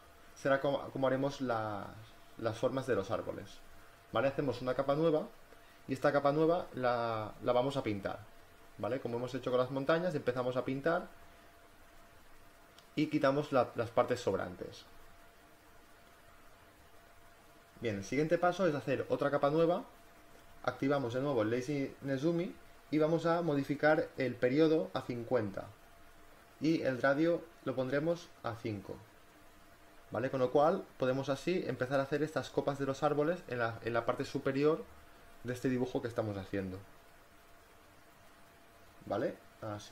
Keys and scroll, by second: 0.3 space, 8.7-11.6 typing, 13.6 b, 15.8 space, 24.5 5, 24.8 0, 27.9 5, 29.0 space.